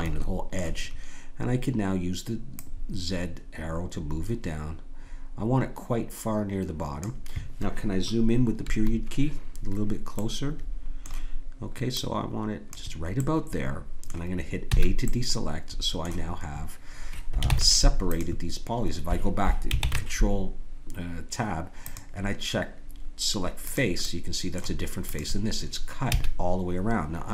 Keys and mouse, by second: 2.5-4.4 drag, 8.6 KP_Decimal, 10.2-13.8 drag, 13.8 middle click, 14.7 a, 17.5 ctrl+Tab, 19.8 ctrl+Tab, 23.6-27.3 drag, 26.1 a.